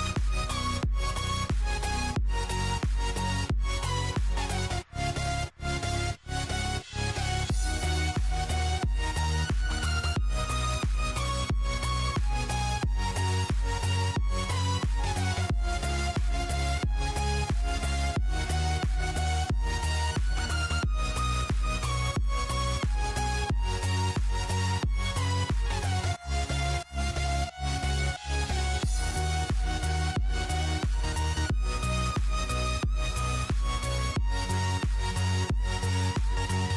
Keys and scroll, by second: 13.8-18.1 typing, 19.2-20.1 typing, 22.9-27.1 typing, 28.3-29.2 typing, 33.2-36.7 typing, 36.6 Tab.